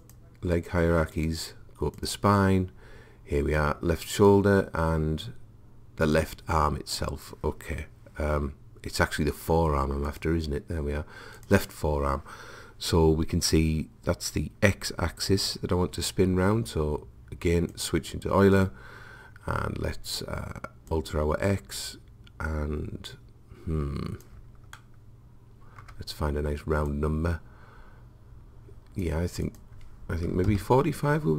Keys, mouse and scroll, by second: 4.2-7.9 drag, 10.1-13.3 drag, 17.7 click, 20.9 click, 24.8-26.7 middle drag, 26.9 click, 29.5 click.